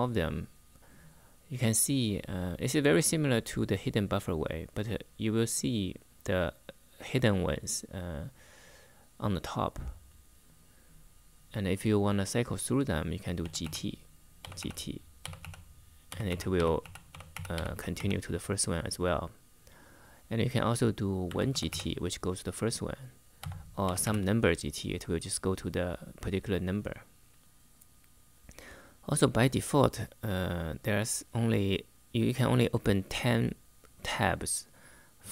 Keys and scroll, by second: 12.9-18.2 typing, 20.7-21.9 typing, 23.1-24.1 typing.